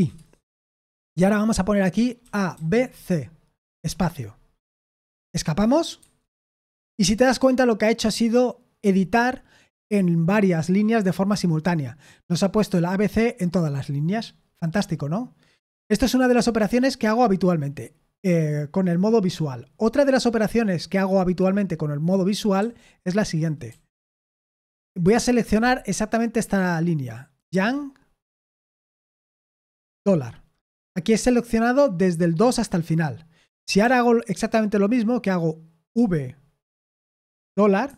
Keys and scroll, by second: 1.9-3.8 typing, 6.0 Escape, 22.6 j, 23.7 w, 27.5 y, 29.9 shift+4, 33.8 k, 35.9 v, 37.8 shift+4.